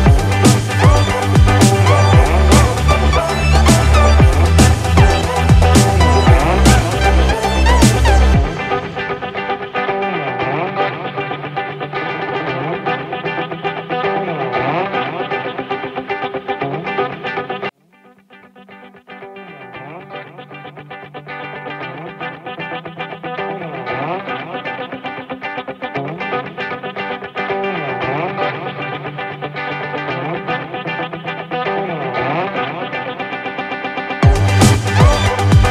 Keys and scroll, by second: 13.4 ctrl+-, 29.9 ctrl+=.